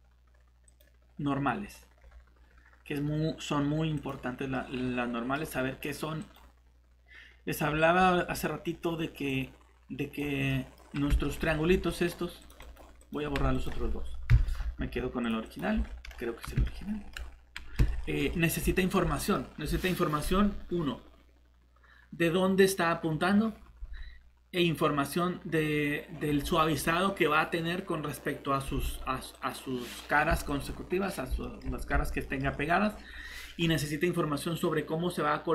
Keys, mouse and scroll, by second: 0.7 click, 1.6-4.0 scroll down 1, 4.0 click, 4.5 middle click, 6.2 click, 7.6-9.3 scroll down 1, 9.3 click, 10.5 middle click, 10.8 scroll up 1, 11.2 middle click, 11.4 scroll down 1, 11.7 shift+Tab, 11.9 middle click, 12.0 scroll up 1, 12.4 click, 14.3 shift+Delete, 15.7 Tab, 16.1 scroll up 1, 16.6 middle click, 19.3 scroll up 1, 29.3 click, 31.4 middle click.